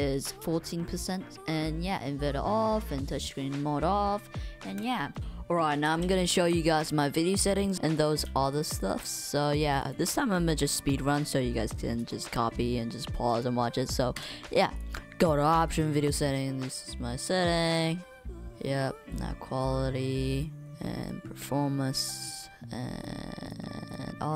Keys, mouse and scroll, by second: 7.5 click, 7.9 click, 8.5 click, 8.9 click, 9.5 click, 12.1 click, 13.3 click.